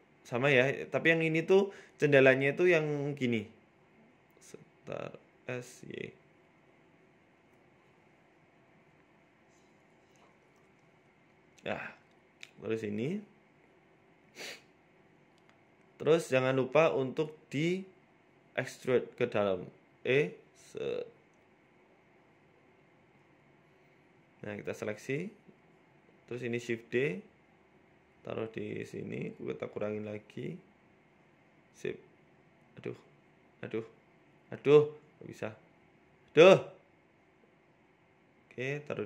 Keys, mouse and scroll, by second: 1.6 ctrl+r, 2.5 s, 4.4 middle click, 4.9 scroll down 4, 5.0 Tab, 5.3 s, 7.0 middle click, 7.5 s, 9.8 KP_7, 10.5 g, 11.8 s, 12.9-13.3 scroll up 3, 13.2 shift+middle click, 13.6 middle click, 14.2 KP_1, 14.7 Tab, 14.8 middle click, 15.6 Tab, 16.1 g, 16.9 Tab, 17.1 z, 17.7 middle click, 18.7 click, 19.7 click, 20.5 right click, 21.0 shift+right click, 21.2-21.7 scroll up 3, 21.4 shift+middle click, 22.0 e, 24.0-24.6 scroll down 5, 24.3 KP_1, 24.6 Tab, 24.9 z, 25.7 right click, 26.3 shift+d, 26.7 s, 28.3-28.7 scroll up 5, 29.1 g, 31.1-31.6 click, 31.4 click, 32.2 click, 32.5 click, 33.2 scroll down 2, 34.0 shift+right click, 34.5 ctrl+z, 34.9 shift+right click, 35.3 ctrl+z, 35.9 shift+right click, 36.3 ctrl+z, 36.5 middle click, 37.5 shift+right click, 38.0 ctrl+z, 38.4 shift+right click, 38.9 Right.